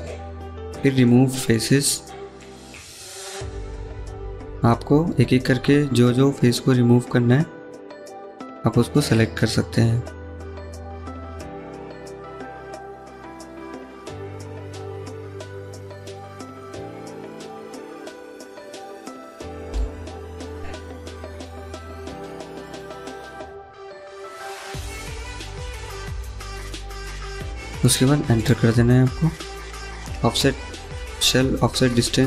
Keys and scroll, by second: 31.9 1.